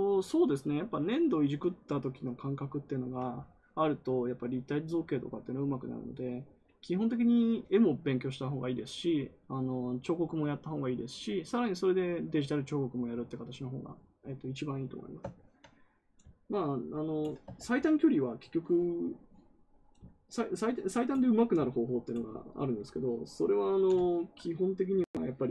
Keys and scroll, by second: 17.5 ctrl+z.